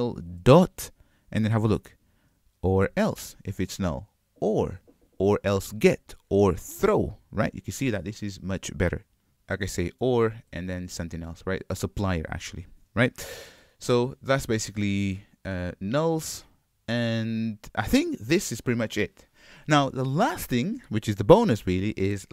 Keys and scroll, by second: 10.1 Return, 13.7 super+y.